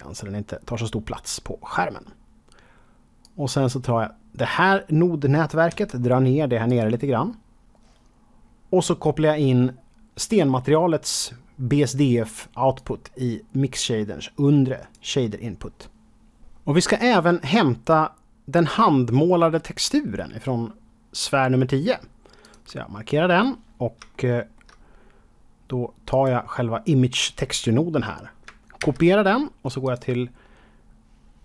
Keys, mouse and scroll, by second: 1.4-3.1 scroll down 1, 3.2-4.7 drag, 5.6 g, 6.6 click, 8.0-10.3 scroll up 5, 12.7-14.9 drag, 22.4 click, 23.3-23.9 scroll down 2, 24.1 shift+middle click, 24.8-26.0 scroll up 2, 26.0 click, 28.7 ctrl+c, 29.8 click.